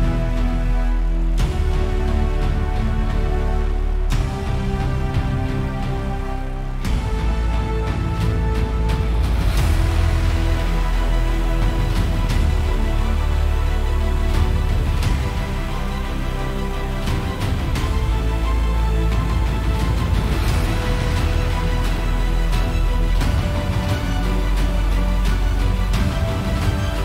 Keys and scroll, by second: 2.3 F7, 24.5 super+=.